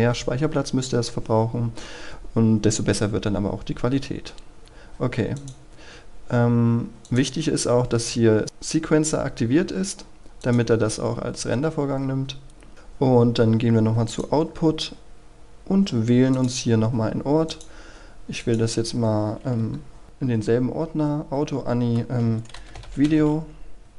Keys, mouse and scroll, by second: 4.6-5.4 scroll down 1, 5.4 click, 11.1-12.9 scroll up 1, 14.1 click, 22.3-23.7 typing.